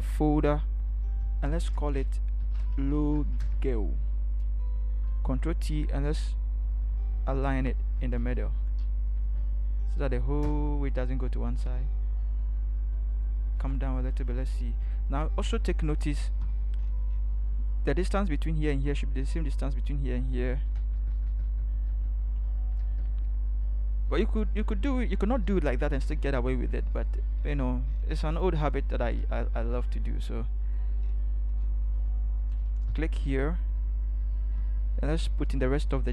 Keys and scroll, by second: 2.2-3.5 typing, 5.1 ctrl+t, 6.7 shift+Left, 7.0 shift+Left, 7.1 shift+Left, 8.0 Left, 8.2 Left, 9.2 Left, 9.4 Left, 10.4 Return, 13.7 ctrl+0, 15.5 ctrl+=, 20.8 Up, 21.0 Up, 21.1 Up, 21.3 Up, 21.4 Up, 22.8 Down, 32.9 t.